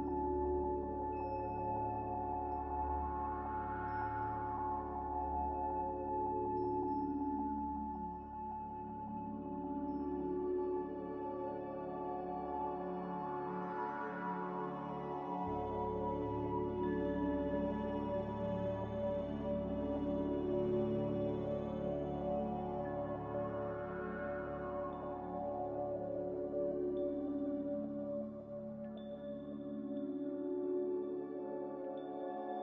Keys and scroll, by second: 2.5-3.1 typing, 3.1 Return, 6.3 g, 11.0-12.0 typing, 13.6 Escape, 16.3-17.2 typing, 17.8 Escape, 22.1-23.2 typing, 27.7 z.